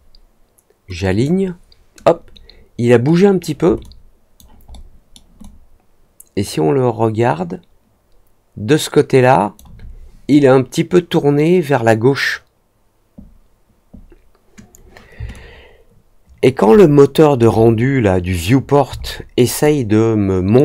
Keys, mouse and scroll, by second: 1.0 click, 3.7 alt+click, 4.6 alt+middle click, 5.3-9.5 alt+drag, 15.3-16.3 alt+drag, 16.7 alt+middle click, 19.0 alt+middle click, 19.6 alt+click.